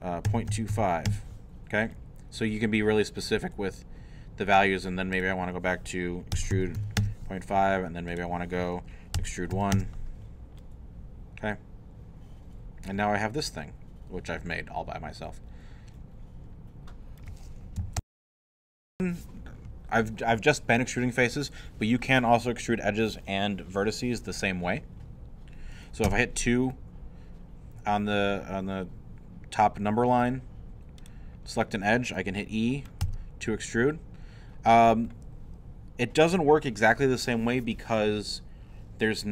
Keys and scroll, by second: 0.0-1.2 typing, 6.1-7.3 typing, 9.1 e, 9.5 i, 18.0 super+., 26.0 2, 33.0 e.